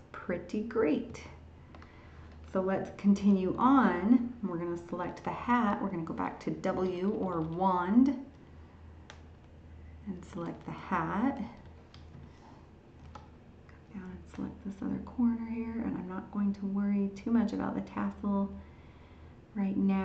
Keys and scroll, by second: 1.1 ctrl+h, 3.2 ctrl+d.